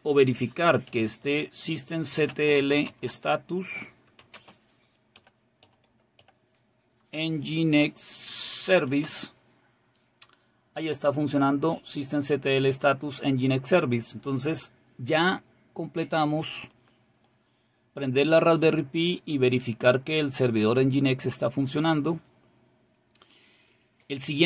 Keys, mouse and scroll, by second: 4.3 typing, 16.8 click, 20.5-24.4 scroll down 4.